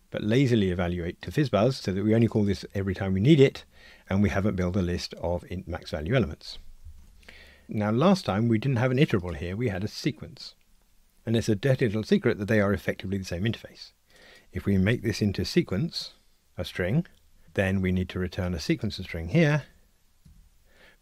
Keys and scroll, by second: 16.5 Tab, 20.3 Tab.